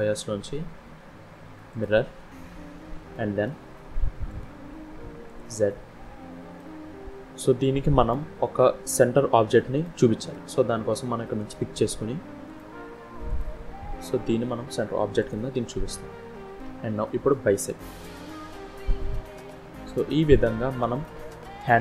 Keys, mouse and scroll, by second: 2.9 scroll down 1, 3.0 middle click, 4.2 click, 5.2 click, 6.5 middle click, 8.1 scroll down 1, 9.8 middle click, 11.3 click, 13.2 click, 15.8 middle click, 17.6 click, 18.4 middle click, 21.5 KP_1.